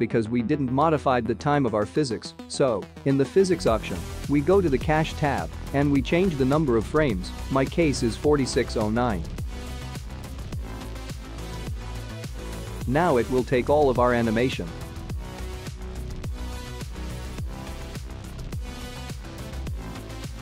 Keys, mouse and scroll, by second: 2.7 click, 3.7-5.9 scroll down 18, 7.8 click, 14.0 click, 15.1 click, 15.5 click, 16.0 space.